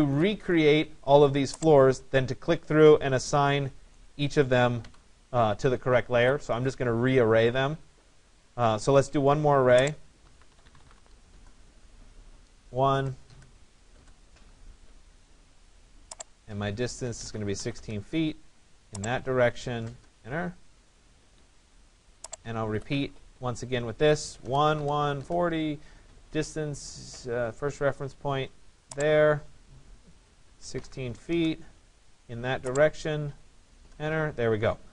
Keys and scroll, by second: 4.5 Delete, 10.9 Return, 17.3 6, 17.8 Return, 30.9 6.